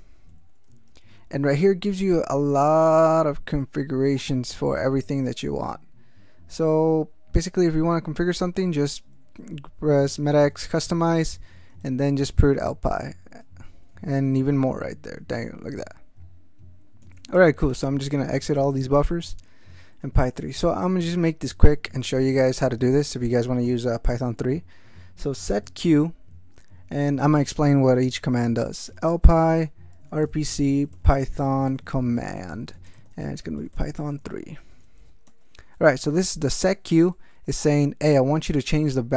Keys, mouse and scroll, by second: 0.9 ctrl+n, 4.5 ctrl+p, 8.3 ctrl+n, 9.5 ctrl+n, 11.3 ctrl+n, 11.8 ctrl+alt+shift+., 12.2 ctrl+alt+shift+p, 13.4 Return, 14.0 ctrl+Return, 14.3 ctrl+v, 15.1 ctrl+alt+v, 15.3 ctrl+alt+v, 17.0 ctrl+x, 17.1 ctrl+k, 17.3 ctrl+Return, 17.6 ctrl+x, 17.7 ctrl+k, 17.8 ctrl+Return, 18.3 ctrl+x, 18.4 ctrl+k, 18.5 ctrl+Return, 20.0 BackSpace, 23.0 shift+9, 24.9-26.1 typing, 28.5-35.1 typing, 35.3 alt+m, 35.8 ctrl+alt+f, 36.4 ctrl+space, 36.7 ctrl+f, 37.5 ctrl+g.